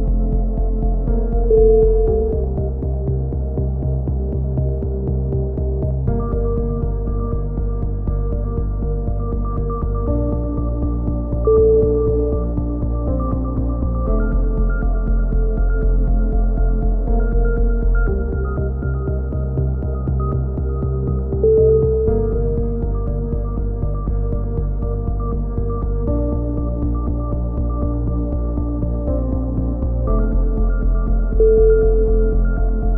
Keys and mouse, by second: 1.6 KP_3, 1.8-2.6 middle drag, 1.9 z, 4.6 a, 4.8 z, 6.0-6.5 drag, 6.5-8.5 middle drag, 8.5 click, 8.7 middle click, 8.8 Tab, 9.9 KP_7, 10.1 click, 10.1 z, 10.1 a, 10.3 Tab, 10.6 click, 12.2-13.8 middle drag, 12.4 z, 12.6 z, 15.6 KP_7, 15.8 middle click, 15.8 z, 16.0-16.5 drag, 17.0 z, 17.1 z, 17.6 click, 18.1-19.3 drag, 19.3 z, 19.6 z, 20.7-21.0 drag, 26.2 click, 26.9 a, 27.1 z, 27.1 middle drag, 27.4-27.9 drag, 28.1-30.5 drag, 30.7-31.2 middle drag, 31.8-32.3 middle drag.